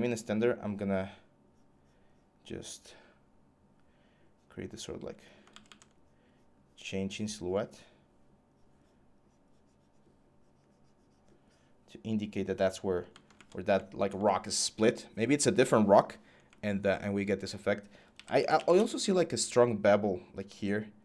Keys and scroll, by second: 5.3 ctrl+z, 5.5 ctrl+z, 17.7-18.9 typing.